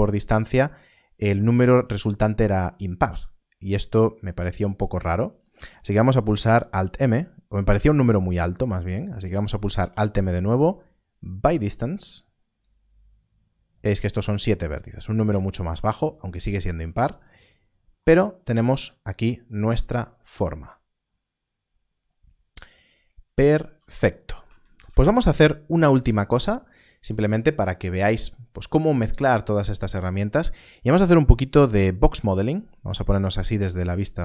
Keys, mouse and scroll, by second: 9.5 alt+m, 12.3 click, 15.9-16.7 scroll down 1, 16.7 scroll, 19.5 z, 19.6 z, 23.6 z, 24.6 alt+a, 31.3 KP_7, 32.7 KP_1, 34.1 shift+a.